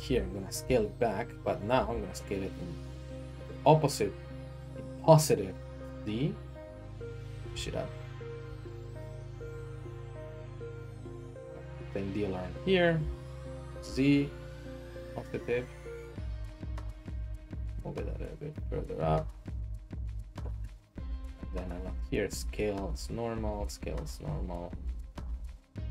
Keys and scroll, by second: 0.0 alt+s, 0.6 s, 1.8 z, 7.2-9.5 typing, 13.0 s, 17.3 g, 21.8 alt+s, 23.4 alt+s, 24.6 ctrl+Tab.